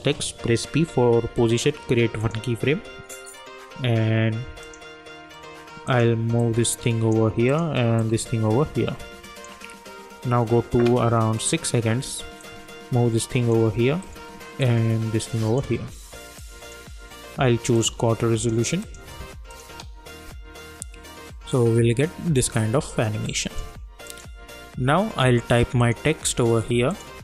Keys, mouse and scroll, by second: 0.8-1.2 typing, 2.2-16.4 drag, 6.7 shift+click, 8.3-9.5 shift+drag, 12.7 shift+click, 14.9 shift+click, 16.7-17.7 drag, 19.6 space, 22.4 space, 23.2 click.